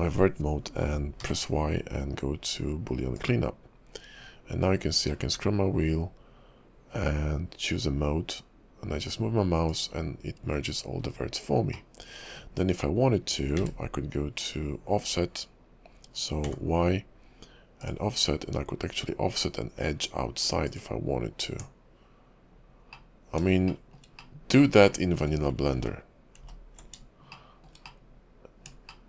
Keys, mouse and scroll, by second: 1.2 y, 11.7 middle click, 13.6 q, 16.5 y, 21.5 Tab, 22.9 middle click, 23.7 shift+middle click, 24.2 middle click, 24.9 shift+middle click, 26.0 ctrl+z, 26.5 ctrl+z, 27.3 shift+middle click, 27.8 middle click, 28.9 shift+middle click.